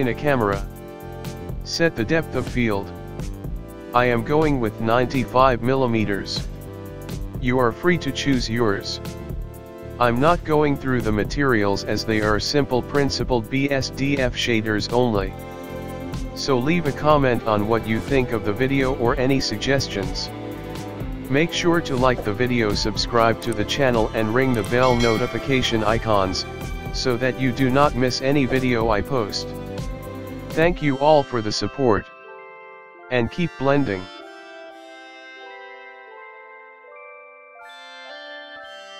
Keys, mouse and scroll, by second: 1.9 KP_1, 2.6 scroll up 3, 3.2 middle click, 4.0 scroll up 1, 4.9 ctrl+alt+KP_0, 6.4 click, 8.3 click, 8.7 click, 11.7 g, 15.4 click, 15.4 click, 15.7 space, 20.5 space, 21.4 scroll up 1, 22.0 scroll down 1, 22.2 shift+middle click, 22.9 scroll up 1, 23.9 click, 24.0 right click, 24.7 click.